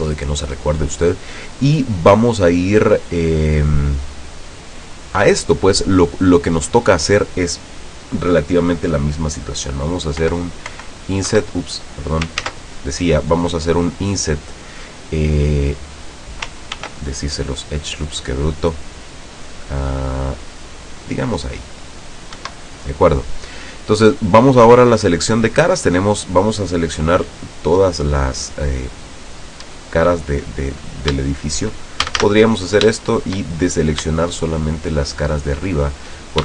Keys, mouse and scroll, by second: 10.4 i, 11.4 Escape, 12.6 ctrl+z, 16.9 ctrl+r, 19.2-19.6 scroll up 2, 20.2 scroll down 2, 21.2 click, 22.5 Escape, 25.5 click, 27.6 middle click, 28.7 scroll down 1, 29.8 right click, 31.3 shift+right click, 32.2 shift+a, 33.1-34.2 shift+middle drag, 34.6 shift+right click, 35.5 shift+right click.